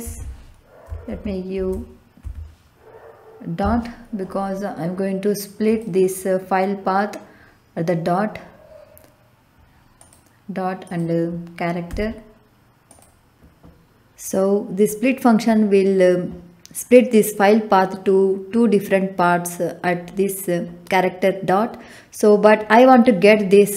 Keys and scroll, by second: 0.0 Left, 1.0 shift+', 2.2 Left, 3.6 ., 11.9 c.